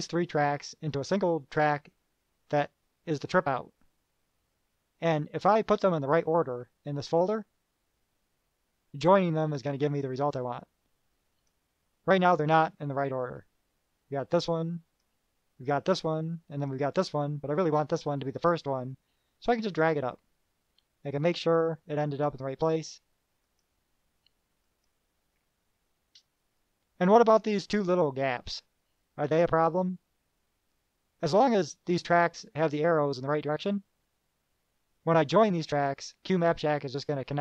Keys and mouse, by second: 10.1 click, 11.5 click, 15.0 click, 16.7 click, 18.7-20.0 drag, 21.4 click, 23.6 click, 26.8-27.7 drag.